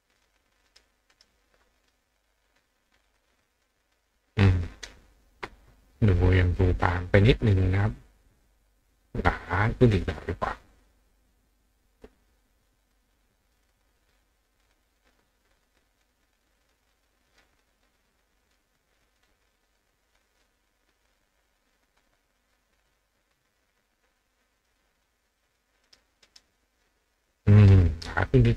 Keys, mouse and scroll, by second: 0.2 click, 0.7 right click, 1.1 right click, 3.1 click, 3.6 click, 8.3 click, 9.9 click, 10.6 click, 11.6 click, 12.9 click, 13.5 click, 14.0 click, 14.4 click, 15.0-16.0 drag, 16.7-17.4 drag, 18.2 click, 19.2 click, 20.7 click, 21.5 click, 22.3 click, 22.5 click, 23.3-24.3 drag, 24.6 click, 25.5 click, 25.9 right click, 26.3 right click, 28.4 click.